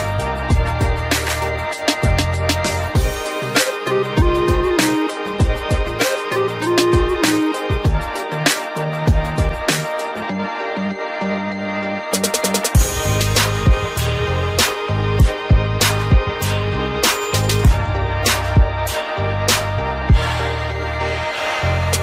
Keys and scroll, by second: 8.9 ctrl+alt+z, 21.9 ctrl+alt+z.